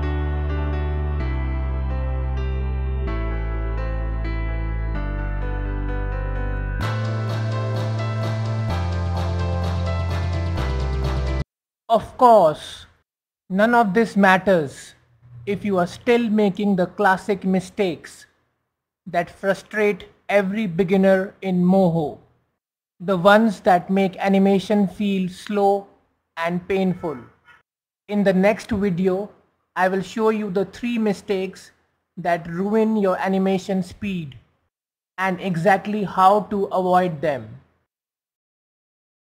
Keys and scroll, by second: 8.8 shift+space.